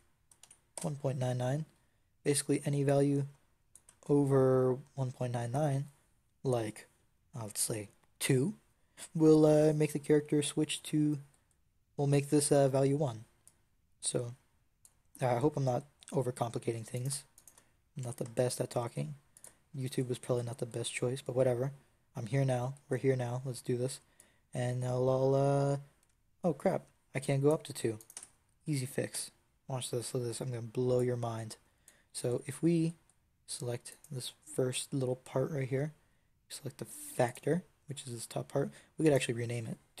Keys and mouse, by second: 2.8-4.7 drag, 16.8-17.9 drag, 17.9 g, 20.7 click, 27.8 click, 28.0 Tab, 29.0 n, 35.4-36.7 drag, 36.7 middle click, 37.1-40.0 drag.